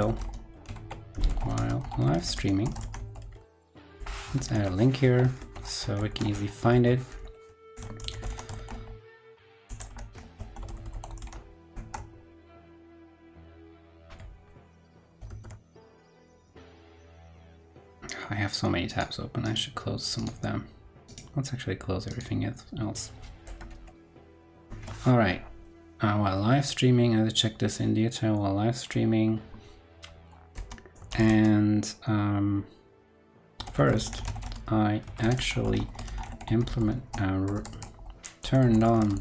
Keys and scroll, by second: 5.3 super+Right, 7.6 super+t, 12.5 super+l, 15.1 super+c, 15.2 super+w, 24.2 super+v, 24.6 super+Right.